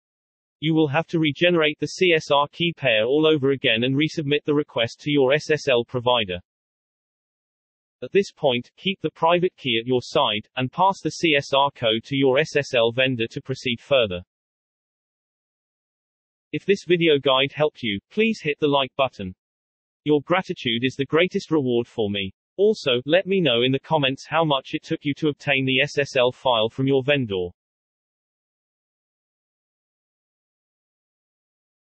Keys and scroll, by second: 2.3-3.4 typing, 4.1 Return, 4.8 ctrl+v.